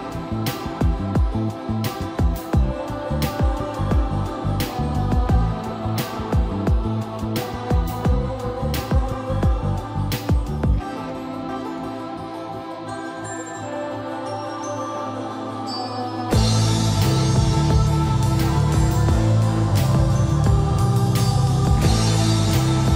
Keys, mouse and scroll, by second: 0.0-1.8 typing, 3.0 click, 4.1 middle click, 4.7-5.0 scroll up 1, 6.3 shift+middle click, 6.9-7.6 typing, 7.6 click, 11.2 middle click, 11.7 scroll up 1, 12.7 middle click, 13.0-13.8 scroll down 1, 13.8 middle click, 14.2-14.8 scroll down 1, 15.3 typing, 15.7 click, 16.8-17.6 typing, 17.7 middle click, 18.1 shift+middle click, 19.9 click, 21.9-22.9 typing.